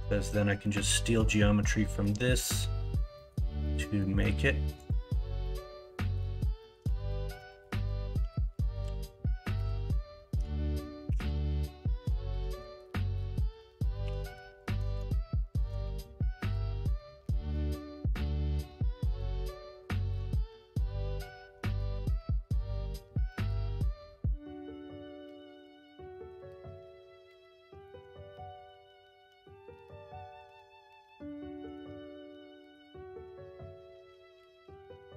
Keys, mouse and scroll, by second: 0.6 middle click, 1.8 middle click, 2.4 middle click, 3.1 middle click, 3.6 middle click, 3.9 middle click, 5.4 middle click, 6.5 middle click, 7.0 ctrl+r, 8.1 middle click, 9.5 ctrl+e, 11.0 ctrl+r, 14.0 3, 15.8 x, 16.8-18.2 middle drag, 19.0 middle click, 20.1 l, 20.4 l, 21.2 x, 21.9 x, 25.0-26.1 drag, 26.1 middle click, 27.5 middle click, 31.6 shift+g, 34.3 s.